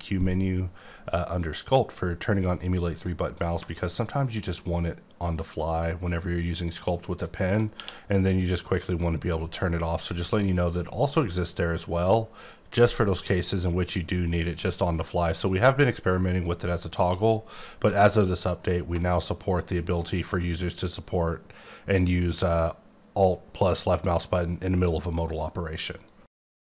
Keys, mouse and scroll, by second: 2.9 click, 6.9 alt+click, 7.2 alt+click, 7.7 q, 8.8 click, 18.1 alt+Num_Lock, 18.1 alt+click, 19.1 middle click.